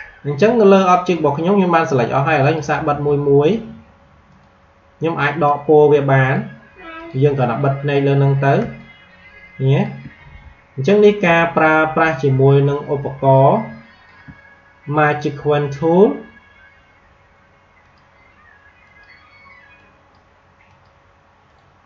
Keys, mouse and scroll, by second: 2.3 click, 8.7 click, 8.9 space, 11.3 click, 11.6 space, 17.8-21.8 drag.